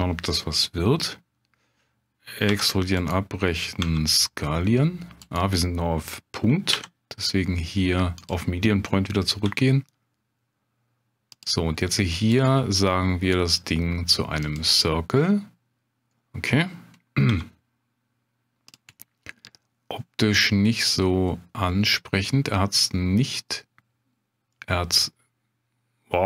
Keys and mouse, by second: 2.5 e, 3.8 s, 6.7 ., 9.4 s, 11.3 click, 12.5-17.3 right drag, 17.3 s, 18.7 click, 18.9-22.4 middle drag, 24.5-26.1 middle drag.